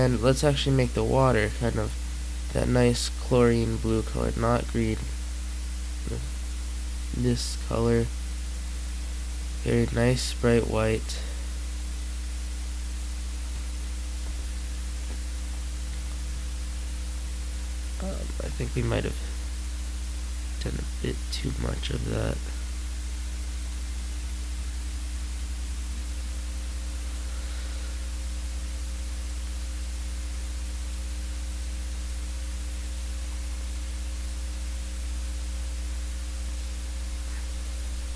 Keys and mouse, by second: 0.0-1.0 middle drag, 1.0-6.0 drag, 7.2 click, 7.7-9.6 drag, 9.6 middle click, 11.0 click, 12.7 click, 14.4 middle click, 16.8 middle click, 24.6 click, 25.5 click, 26.3 click, 29.2 click.